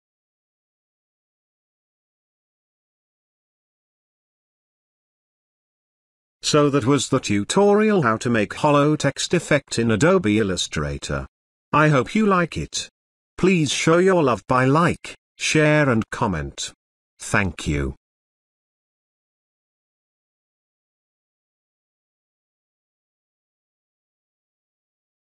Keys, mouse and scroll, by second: 2.6 click, 2.7 ctrl+z, 5.1 ctrl+z, 7.2 click, 9.8 click, 14.0 click, 16.9 click, 19.5-19.8 scroll down 1, 21.8 click.